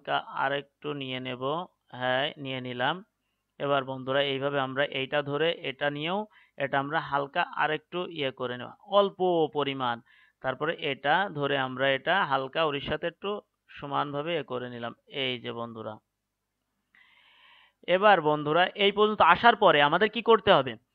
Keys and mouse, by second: 4.5-9.0 right drag, 7.3-10.9 drag, 10.9-18.8 right drag.